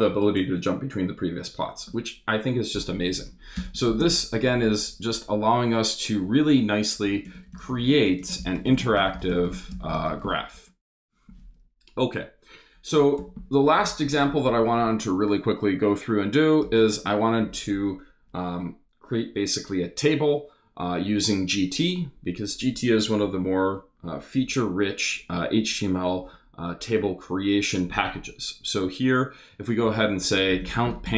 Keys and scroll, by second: 3.1 Up, 3.5 Return, 3.8 shift+3, 4.0 shift+space, 4.9 space, 7.0-10.6 typing, 12.9 Return, 16.6 shift+3, 16.9 shift+space, 17.7 space, 29.6-31.1 typing.